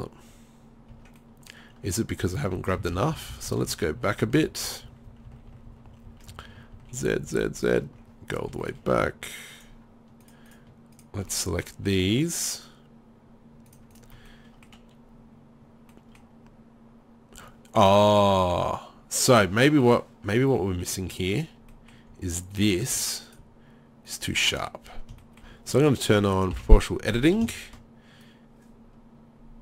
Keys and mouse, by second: 0.9 Tab, 2.2 z, 2.6 z, 3.1 ctrl+z, 3.3 ctrl+z, 3.5 ctrl+z, 3.7 ctrl+z, 3.9 ctrl+z, 4.0-4.7 ctrl+z, 4.9 ctrl+z, 5.1 ctrl+z, 5.3 ctrl+z, 5.5 ctrl+z, 5.7 ctrl+z, 5.9 ctrl+z, 6.1 ctrl+z, 6.3 ctrl+z, 6.5 ctrl+z, 6.7 ctrl+z, 7.0 ctrl+z, 7.3 ctrl+z, 7.6 ctrl+z, 8.6 middle click, 10.2 click, 11.3 middle drag, 14.3 middle click, 14.5-15.7 drag, 15.7 middle click, 19.6-24.6 middle drag, 24.6 right click, 24.9 middle click, 25.3-27.4 right drag, 26.6 o, 27.5-28.2 right drag, 29.4 right click.